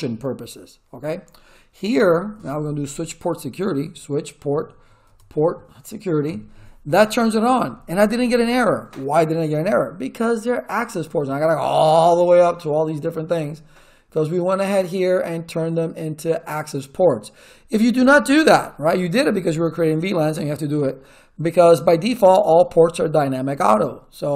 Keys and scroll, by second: 1.7-2.8 typing, 3.7 Tab, 4.2-5.2 typing, 6.3 Return.